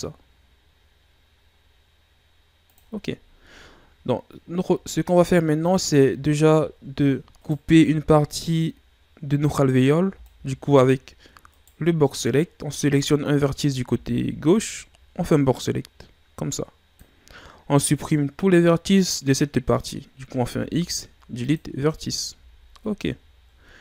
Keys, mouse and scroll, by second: 3.1-4.4 ctrl+scroll up 5, 4.4-5.2 ctrl+scroll up 2, 5.2-6.0 scroll up 1, 6.4-7.0 shift+scroll down 4, 7.4 right click, 7.8 z, 10.0 b, 10.2-11.7 drag, 12.0 right click, 13.8 b, 20.4 x, 22.3 z, 23.1-23.8 ctrl+scroll up 5.